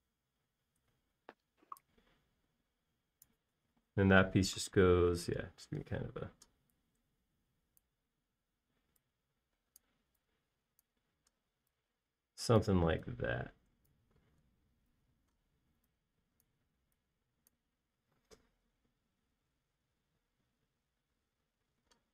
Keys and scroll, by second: 0.5 Escape, 2.4 Escape, 7.4 p, 12.6 e, 20.0 space.